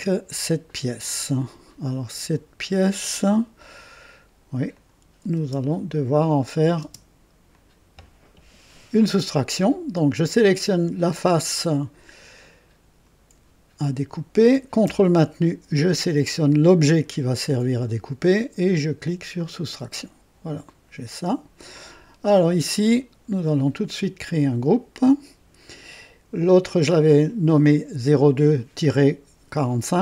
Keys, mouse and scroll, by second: 2.3 click, 4.7 click, 5.3 space, 6.7 space, 7.5 click, 16.5 ctrl+click, 19.3 click, 20.6 click, 24.7 click.